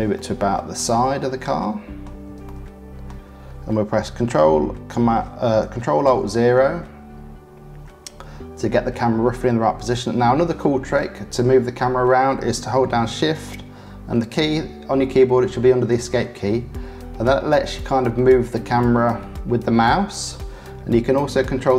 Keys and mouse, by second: 1.0-2.2 drag, 2.4 shift+click, 6.0 ctrl+alt+KP_0, 14.3 shift+`, 18.5 middle click, 19.1 middle click, 19.8-21.7 middle drag.